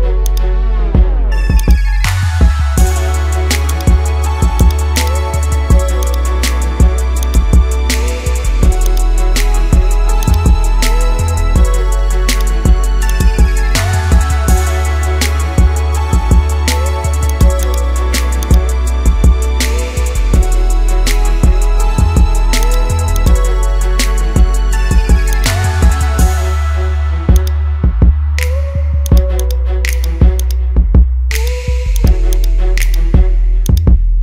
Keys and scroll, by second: 5.6 ctrl+z.